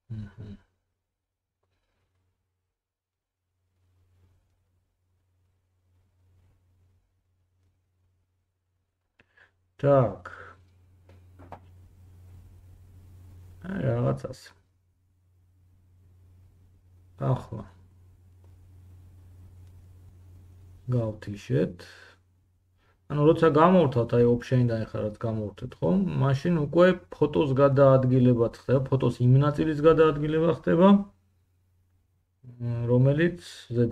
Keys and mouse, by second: 0.5 g, 3.6 click, 4.2 middle click, 4.3-21.5 drag, 4.4 g, 5.7 middle click, 5.7 right click, 6.0 g, 21.5-27.6 middle drag, 27.6-33.9 drag, 33.8 Tab.